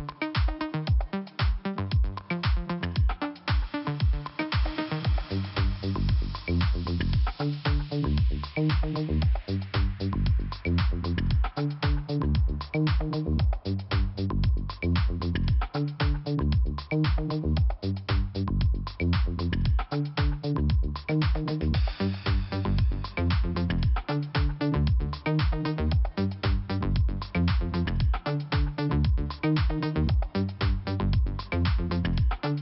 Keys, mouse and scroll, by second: 0.2 click, 1.0 click, 3.0 click, 5.5 click, 6.7 click, 7.5 click, 9.0 click, 10.8 click, 12.0 click, 12.9 click, 14.3 scroll up 1, 17.0 click, 19.1 click, 19.8 click, 20.6 click, 21.8 click, 24.3 click, 25.5 click, 26.9 click, 27.8 click, 29.1 click, 29.6 scroll up 2.